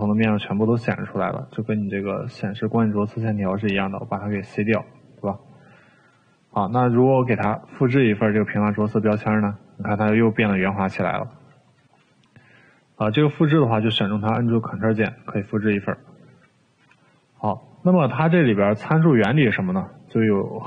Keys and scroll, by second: 4.3 c, 11.3 ctrl+z, 15.5 ctrl+z, 16.4 Delete.